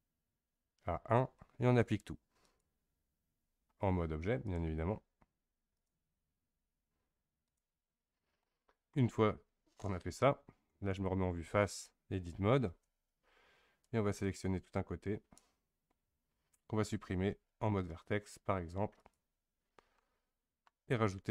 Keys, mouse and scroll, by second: 2.4-8.4 drag, 8.4-10.7 middle drag, 10.7 KP_1, 12.7 Tab, 13.8 click, 17.5 x, 20.0-21.3 middle drag.